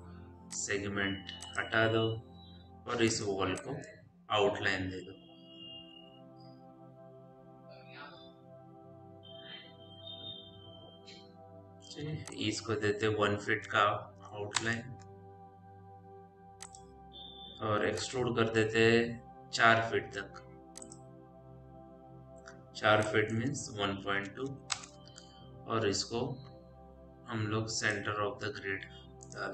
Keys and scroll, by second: 2.6 Delete, 13.8 KP_0, 14.0 KP_Decimal, 14.0 KP_3, 14.4 Return, 24.3 ., 24.3 KP_2, 24.6 Return.